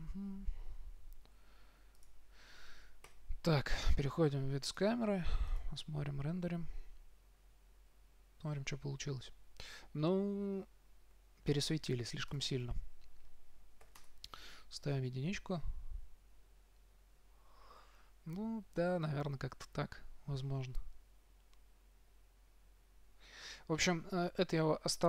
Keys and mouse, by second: 0.2 KP_1, 1.6 r, 2.4-3.4 drag, 3.4 KP_0, 7.2 middle click, 12.8-14.4 drag, 14.4 middle click, 14.5 click.